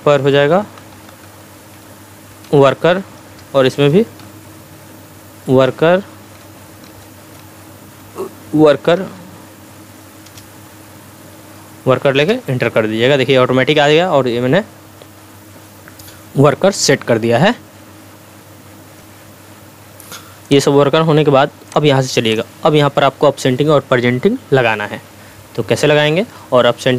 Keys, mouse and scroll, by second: 0.6-4.7 typing, 3.2 Return, 5.6 Down, 6.6-7.5 typing, 7.9 Down, 8.7-9.7 typing, 10.7-11.5 typing, 12.3 Return, 19.0 F1.